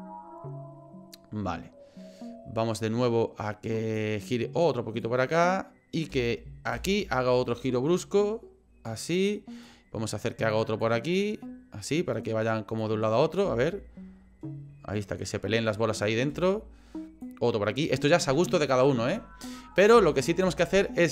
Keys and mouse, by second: 5.0 click, 6.1 space, 6.7 space, 7.7-8.9 drag, 9.6 click, 10.8-11.9 drag, 12.8 click, 13.4 space, 16.3 space, 17.2-18.2 drag, 19.9 space, 20.4 space.